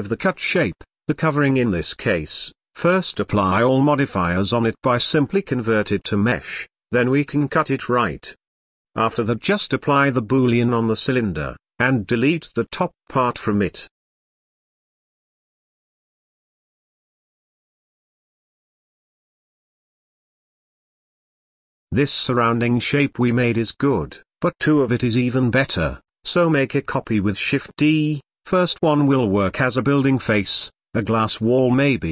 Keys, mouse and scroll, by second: 1.1 z, 2.2 shift+click, 2.8 shift+h, 3.2 click, 3.5 click, 5.4-7.6 drag, 8.5 click, 9.4 click, 11.0 z, 12.9 click, 13.4-14.6 drag, 15.7 click, 16.0-16.8 middle drag, 16.8 Tab, 17.0 click, 17.2 Tab, 17.7 3, 17.8 click, 18.3 ctrl+KP_Add, 18.8 ctrl+i, 19.2 x, 19.7 middle click, 20.3 click, 20.5 middle click, 21.0 x, 21.6 Tab, 21.7 click, 21.9 click, 22.3 alt+h, 22.6 middle drag, 22.9 click, 23.0 Tab, 23.3 1, 23.5 KP_1, 23.7 z, 23.9 click, 24.3 g, 25.6 z, 25.8 shift+middle click, 25.9 scroll up 1, 27.0 shift+d, 28.1 click, 28.3-30.4 drag, 31.5 click, 31.8 click, 32.0-32.1 drag.